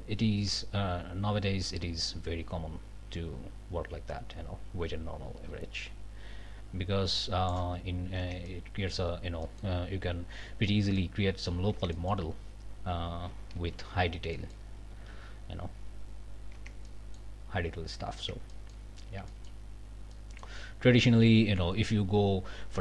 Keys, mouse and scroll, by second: 7.8 scroll down 2, 8.2 Tab, 8.5 click, 9.4 click, 10.5 scroll up 1, 11.0 click, 11.7 Tab, 11.9 click, 12.4 scroll up 1, 13.1 ctrl+z, 14.3 ctrl+click, 14.6 ctrl+middle click, 15.0 ctrl+alt+a, 15.3 alt+scroll up 1, 16.2-16.5 scroll down 1, 16.6 Tab, 16.9 middle click, 17.7 scroll up 1, 18.2 Tab, 18.5 click, 18.9 scroll up 1, 19.3 shift+click, 19.7 shift+scroll down 1, 20.1 click.